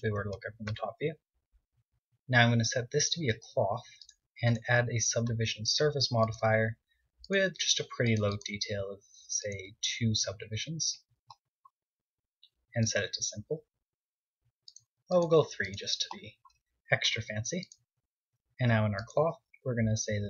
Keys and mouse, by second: 10.3-12.0 middle drag, 12.0-14.0 drag, 15.2-20.0 drag.